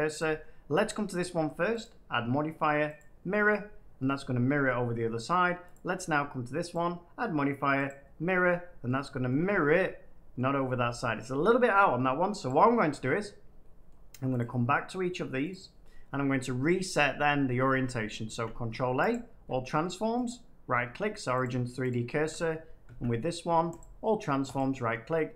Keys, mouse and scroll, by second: 0.9 click, 1.7 click, 2.9-3.9 drag, 3.9 middle click, 5.6-7.6 drag, 8.4 click, 8.8-10.2 middle drag, 10.9 shift+middle click, 12.4 click, 13.0 middle click, 13.8 middle click, 14.3 click, 15.4 click, 16.7 middle click, 17.8 middle click, 18.2 ctrl+a, 19.0 click, 19.7 middle click, 20.2 right click, 21.3 click, 21.8 click, 22.8 ctrl+a, 23.7 click, 24.5 right click.